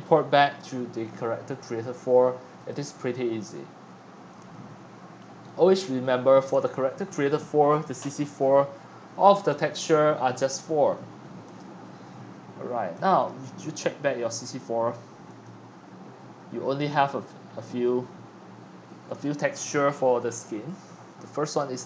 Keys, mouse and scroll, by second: 4.5-6.1 middle drag, 4.5 scroll up 2, 4.8-6.1 scroll down 3, 6.1 click, 7.0 right click, 7.9-10.2 middle drag, 11.6-13.2 drag, 14.6 click, 15.4-16.6 drag, 16.8-18.6 scroll down 6, 21.5-21.8 drag.